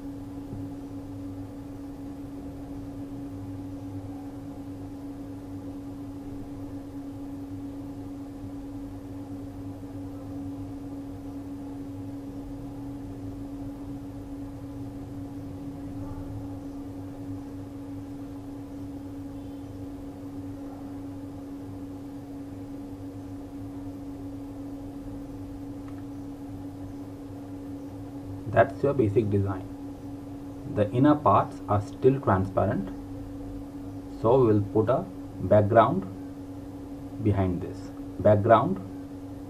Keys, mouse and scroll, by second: 2.0 z, 2.2 click, 3.8 z, 3.9 click, 8.5-8.9 typing, 10.0 click, 11.5 z, 11.7 click, 12.5 z, 12.8 click, 25.6 z, 25.9 click, 30.8 click.